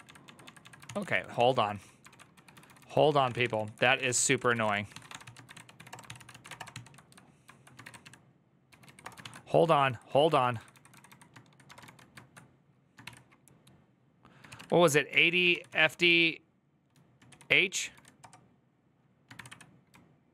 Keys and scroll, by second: 0.0 Right, 0.2 Right, 0.6 Right, 0.6 ctrl+c, 0.7-9.1 typing, 9.4 ctrl+Left, 10.7 ctrl+Left, 11.4 BackSpace, 11.6 shift+', 12.8 typing, 14.2-15.8 typing, 17.1-20.3 typing, 19.2 Up, 19.7 Left.